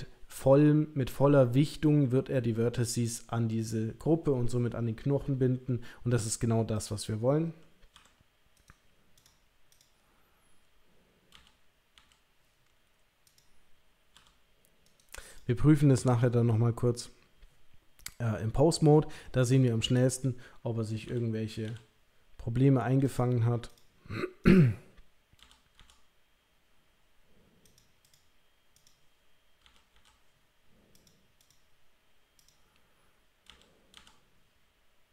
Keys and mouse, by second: 6.8 click, 7.9 g, 9.2 click, 9.7 click, 11.3 l, 11.9 l, 13.4 click, 14.1 g, 15.3 click, 16.1 click, 21.1 l, 21.7 l, 23.1 click, 23.7 click, 24.4 click, 25.5 l, 25.8 l, 27.6 click, 28.1 click, 28.7 click, 29.6 l, 29.9 l, 31.0 click, 32.4 click, 33.5 l, 33.9 l.